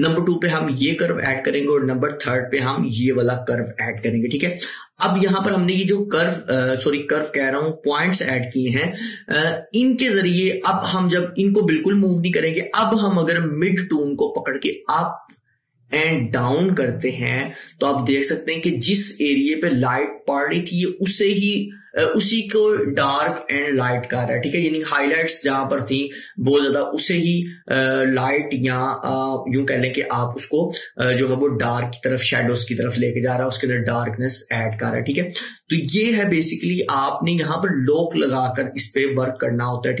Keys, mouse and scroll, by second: 0.9 click, 13.9 click, 14.0-24.0 drag, 35.9-40.0 drag.